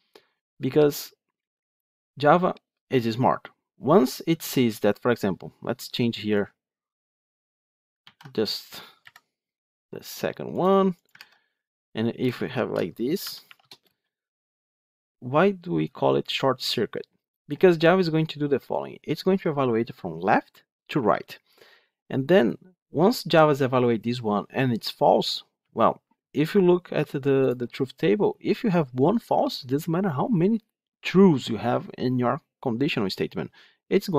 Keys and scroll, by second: 7.9 ctrl+x, 8.9 Delete, 11.0 ctrl+v.